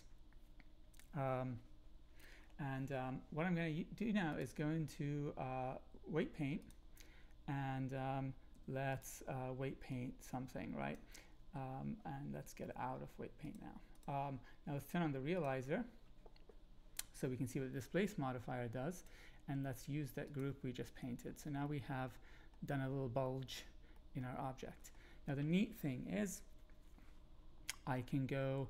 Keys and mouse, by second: 4.5-6.8 drag, 8.5 f, 9.9-10.9 drag, 13.6 click, 15.3 click, 18.9-20.4 drag, 21.6-22.5 middle drag, 23.2 middle click, 23.9 middle click, 24.6 click, 24.6 right click.